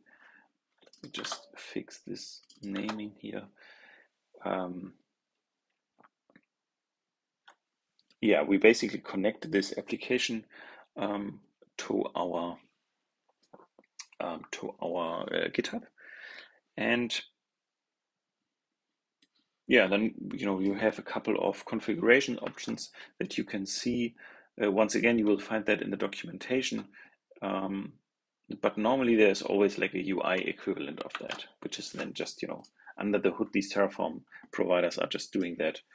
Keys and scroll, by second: 1.1 super+c, 2.7 super+v, 22.4 super+Tab, 31.1 super+Tab.